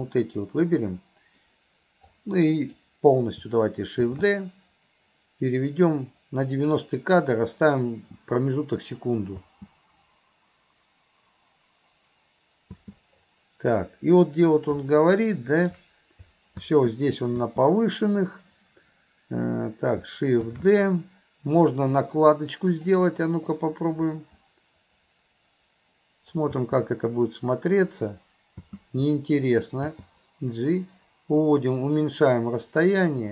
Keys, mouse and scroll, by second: 0.1 click, 2.1 click, 15.0 middle click, 23.6-26.5 drag, 33.1-33.3 drag.